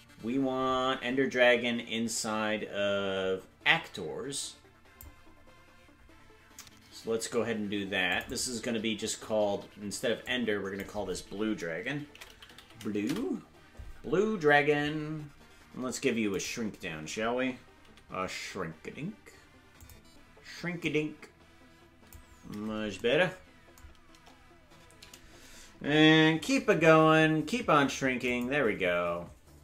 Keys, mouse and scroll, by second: 0.3-1.5 scroll down 1, 1.5-2.9 scroll down 5, 8.1 click, 8.3-13.9 drag, 20.8-22.1 drag, 20.8 right click, 20.8 s, 24.1 KP_0, 26.4 s.